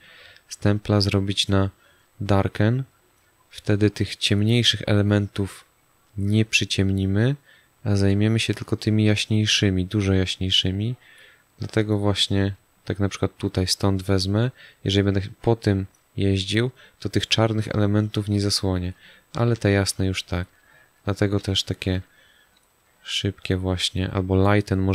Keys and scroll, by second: 8.5 ctrl+alt+z, 16.4 ctrl+alt+z, 19.3 space, 21.4 space.